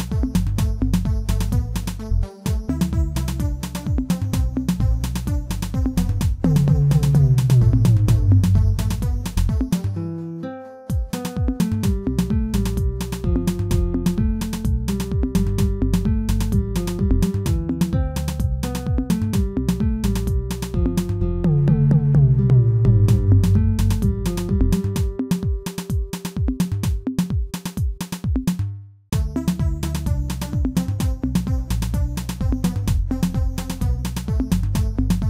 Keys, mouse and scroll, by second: 3.8-4.6 scroll up 5, 4.6 Tab, 5.6 x, 7.8 Tab, 9.3-11.0 drag, 11.0 Tab, 11.4-12.5 middle drag, 12.5 alt+click, 13.1-13.5 scroll up 2, 14.1 alt+shift+click, 15.2 ctrl+z, 15.6 2, 16.5 alt+shift+click, 17.6 alt+shift+click, 18.6 alt+shift+click, 19.3 alt+shift+click, 20.3 alt+shift+click, 20.7 shift+middle click, 21.2-21.7 scroll up 3, 23.1 alt+shift+click, 24.6 alt+shift+click, 25.7 alt+shift+click, 27.1 alt+shift+click, 28.1 alt+shift+click, 29.7 ctrl+z, 30.5 alt+shift+click, 31.2 x, 32.7-33.3 scroll down 2, 33.3 Tab, 33.8 Tab, 34.6 typing, 35.1 alt+click.